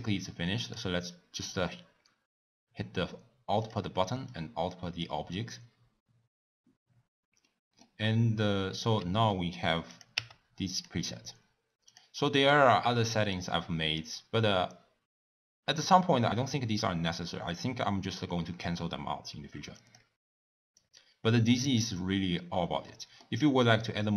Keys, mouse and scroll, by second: 2.3-6.6 drag, 11.1 w.